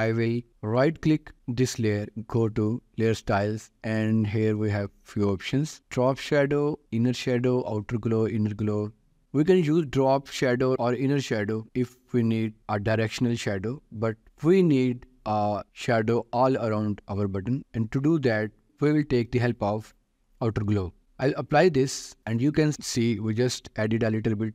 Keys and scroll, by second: 23.8 ctrl+s.